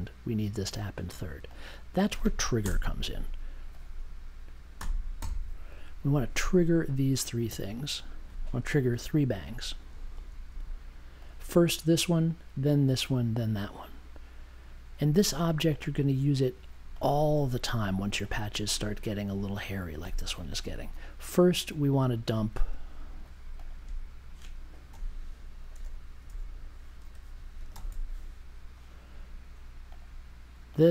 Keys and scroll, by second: 2.6 BackSpace, 4.7 n, 5.2 t, 9.4-10.4 typing, 24.9 m, 25.8 u, 27.1 BackSpace, 27.3 d, 27.7 m.